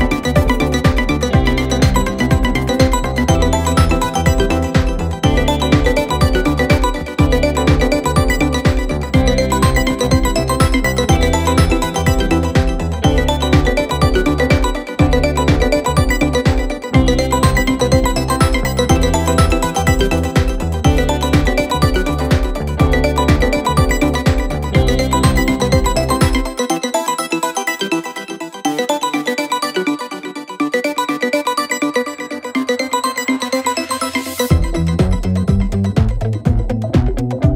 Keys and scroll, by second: 2.5 4, 12.1 9, 12.1 Return, 23.1 Delete, 27.2-28.0 typing, 29.3-30.2 typing, 37.3 5.